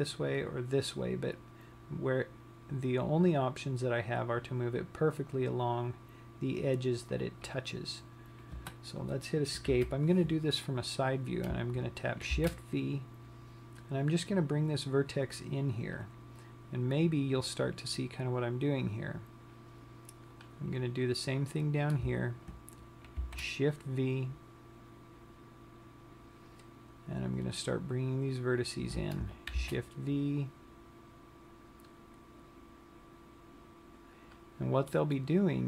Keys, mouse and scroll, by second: 10.1 KP_3, 12.9 shift+v, 16.5 click, 21.1 click, 23.7 shift+v, 28.1 click, 29.0 click, 30.0 shift+v, 35.1 click, 35.3 middle click.